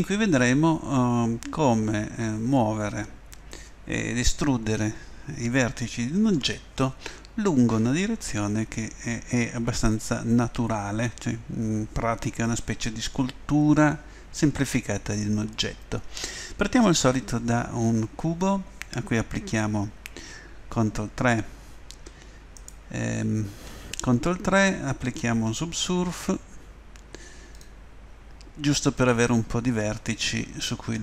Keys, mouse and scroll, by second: 14.1-21.4 middle drag, 23.2 ctrl+3, 27.5-30.7 drag, 30.7 middle click.